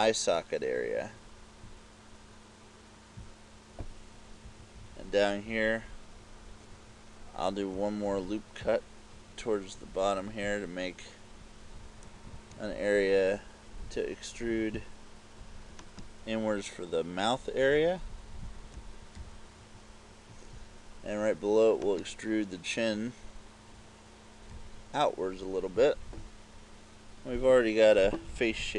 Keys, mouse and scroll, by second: 3.5 click, 4.5 KP_2, 4.8 KP_2, 8.1 ctrl+r, 10.8 click, 12.4 ctrl+Tab, 16.0 right click, 18.8 e, 20.8 click, 22.0 right click, 23.6 e, 26.1 click, 28.4 KP_8.